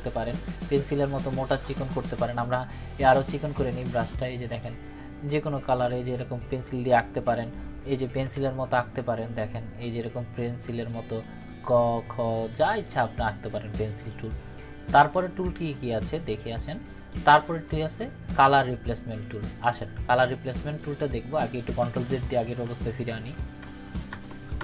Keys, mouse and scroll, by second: 8.2 ctrl+-, 9.9-10.8 drag, 20.8 click, 22.4 ctrl+z.